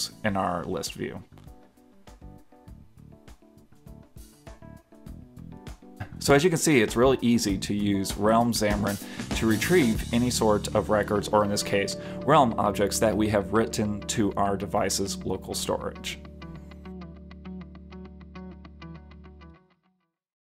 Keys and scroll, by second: 4.0 super+Tab.